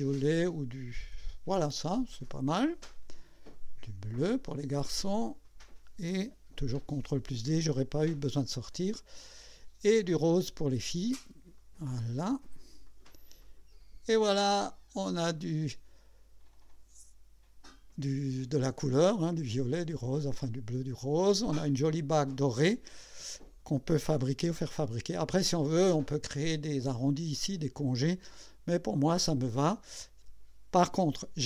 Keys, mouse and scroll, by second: 0.5 click, 2.3 click, 3.5 click, 5.4 click, 6.9 ctrl+d, 8.5 click, 10.4 click, 11.6 click, 12.9 click, 13.4 click, 14.3-23.7 drag, 24.1 scroll down 2, 25.1 click, 28.0-30.6 drag.